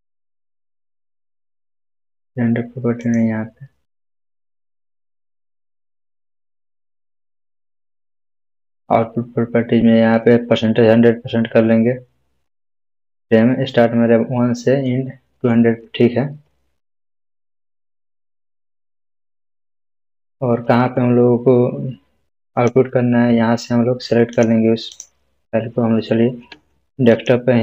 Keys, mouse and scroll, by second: 2.9 click, 16.4-18.9 scroll down 1, 22.5-25.2 scroll down 1, 25.2 click, 27.1 click.